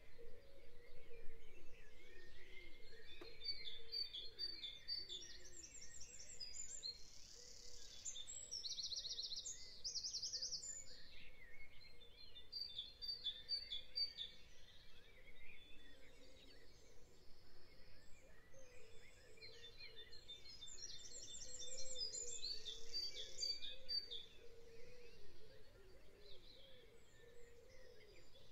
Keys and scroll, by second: 2.2 a, 4.6 v, 5.8 v, 16.4 ctrl+8, 23.0 p.